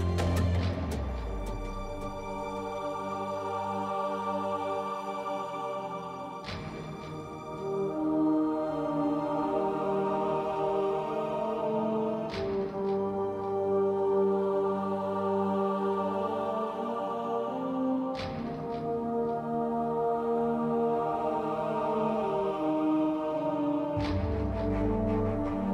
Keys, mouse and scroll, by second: 0.5 ctrl+Tab, 3.7 click, 9.6 z, 10.6 z, 12.2 ctrl+z, 13.2 z, 14.0 z, 15.0 ctrl+b, 17.3 Tab, 23.4 a.